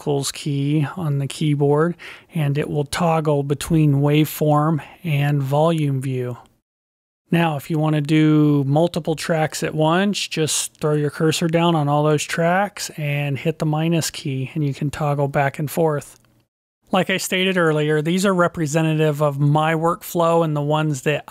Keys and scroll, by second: 0.9 -, 2.9 -, 5.1 -, 7.0 -, 8.3 -, 10.8 -, 13.1 -, 15.7 -.